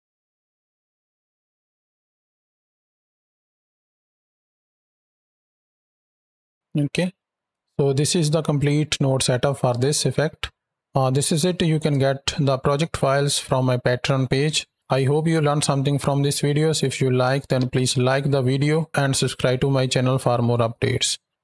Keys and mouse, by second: 0.5 space, 1.3 ctrl+click, 1.7 click, 2.3 drag, 2.7 space, 3.4 space, 3.6 drag, 4.2 click, 4.2 space, 4.8 space, 4.9-6.4 drag, 6.5 ctrl+space, 7.4 space, 8.0 ctrl+click, 11.2 ctrl+space, 12.7 ctrl+space.